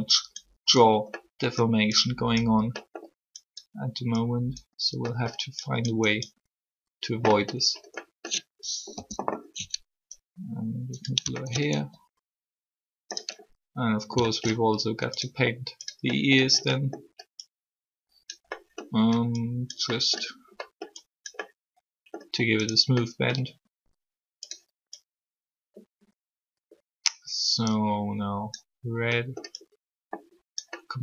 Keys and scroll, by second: 8.9 3.